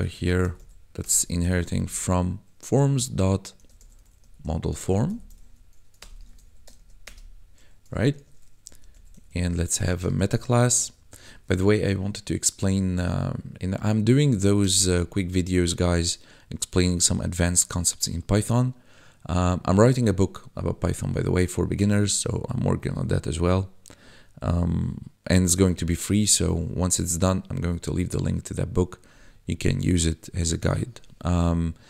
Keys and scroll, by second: 0.0-1.8 typing, 3.5-6.7 typing, 6.2 ctrl+s, 6.4 Right, 7.0 Return, 8.1 ctrl+s, 8.6-11.2 typing, 14.6 Return.